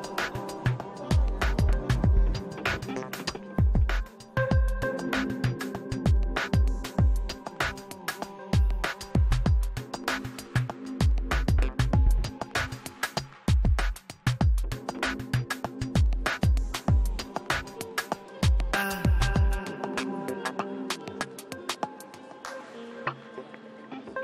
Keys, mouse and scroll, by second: 1.1-6.2 middle drag, 6.1 shift+c, 6.2 f, 6.4-12.7 middle drag, 7.6 f, 8.0 f, 8.3-10.2 drag, 9.0 f, 12.7-14.8 drag, 14.6-16.9 middle drag, 16.9 click, 17.0-21.6 middle drag, 17.4 click, 20.8-24.2 drag.